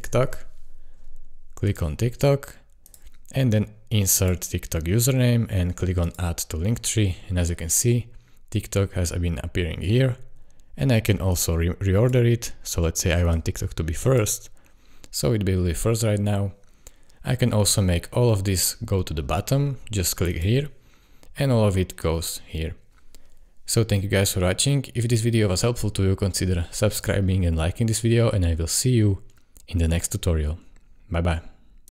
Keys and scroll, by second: 0.0-0.5 typing.